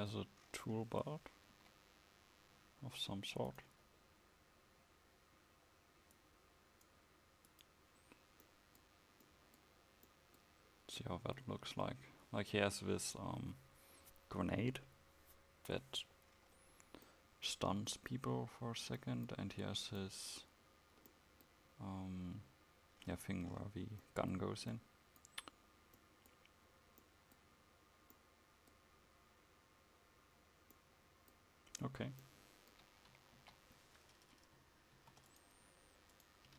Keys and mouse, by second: 1.6 KP_1, 33.4 KP_1, 35.0 ctrl+s.